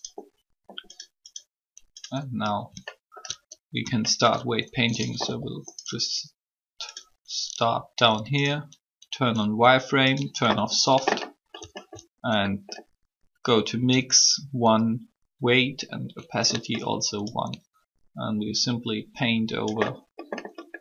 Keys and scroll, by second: 5.2 alt+shift+r.